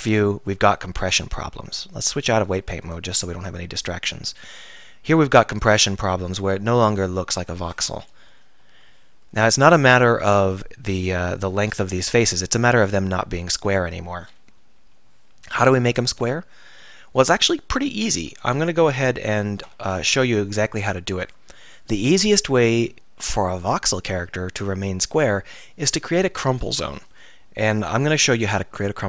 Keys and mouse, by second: 0.6 KP_3, 8.3 KP_1, 8.7 KP_3, 14.6 KP_1, 14.8 KP_3, 16.4-18.0 middle drag, 18.4 alt+r, 19.7 alt+r, 20.6 Tab, 28.7-29.0 middle drag.